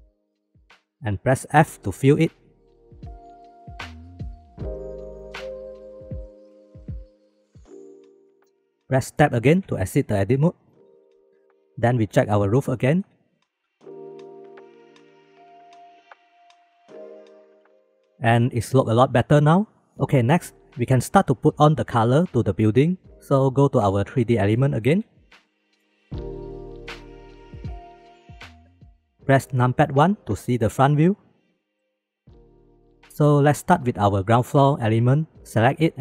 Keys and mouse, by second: 2.1 f, 2.7 click, 4.9 shift+f, 7.2 f, 7.6 ctrl+s, 8.4 shift+middle click, 9.6 Tab, 10.2-10.7 middle drag, 11.0 ctrl+s, 12.8 shift+middle click, 13.8 shift+middle click, 14.7 shift+b, 16.0 middle click, 16.7-17.3 shift+middle drag, 17.4 shift+middle drag, 24.5 shift+middle drag, 25.5 shift+middle click, 26.5 shift+b, 28.0 drag, 30.2 KP_1, 31.6 shift+middle click, 32.4-32.7 shift+middle drag, 33.1 ctrl+s.